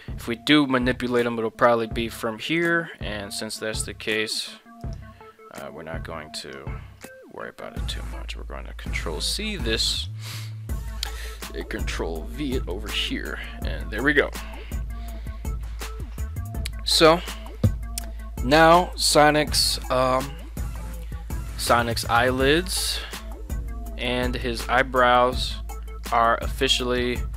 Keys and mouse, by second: 5.0 right click, 6.5 click, 9.1 ctrl+c, 12.2 ctrl+v, 13.3-13.8 middle drag, 14.3-16.0 middle drag, 17.1 KP_1, 20.6 shift+middle drag, 22.1 right click, 22.9 g, 23.9 right drag, 24.8 right click, 25.0 g, 26.9 right click, 27.2 g.